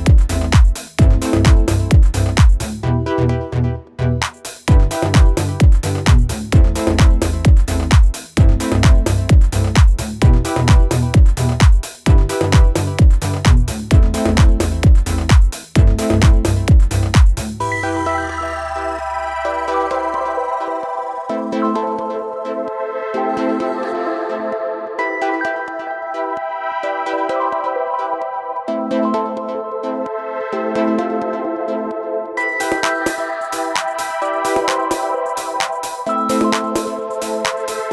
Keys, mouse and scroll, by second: 0.3-0.9 alt+scroll down 2, 1.0 alt+scroll up 1, 1.4 alt+scroll down 1, 2.0 space, 2.2 click, 2.6 space, 3.5 scroll down 1, 4.2 space, 4.3 click, 4.8 space, 9.1 click, 17.7 click, 20.9 click, 28.9 click, 33.7 click, 37.4 click.